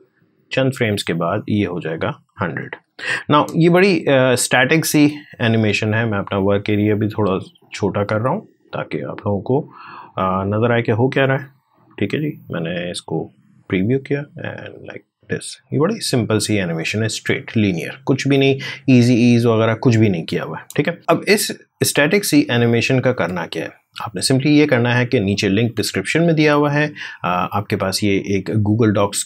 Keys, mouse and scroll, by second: 1.8-3.1 typing, 7.3 click, 7.3-13.1 drag, 20.5 space, 21.0-25.5 drag, 25.5 alt+Tab.